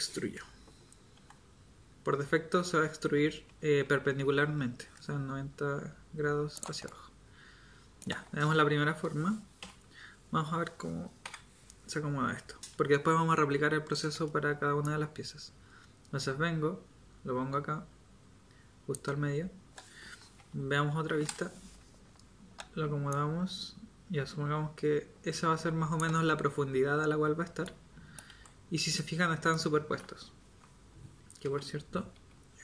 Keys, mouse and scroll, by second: 1.2 e, 6.9-9.6 middle drag, 9.6 KP_7, 11.2 Tab, 20.5 KP_1, 28.3 z, 31.4 Tab.